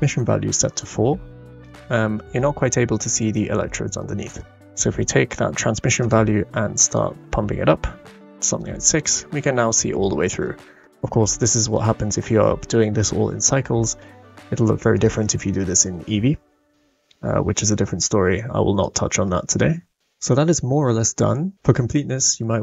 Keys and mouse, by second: 1.7-2.3 middle drag, 3.2 middle click, 4.4 middle click, 6.0 click, 6.8 click, 9.1-10.5 middle drag, 10.8 middle click, 11.2 middle click, 15.0-16.5 drag, 18.8-20.0 drag, 21.0 middle drag, 21.1 click, 21.1 right click, 21.3 click, 21.3 right click, 21.4 middle click, 21.5 click, 21.5 right click.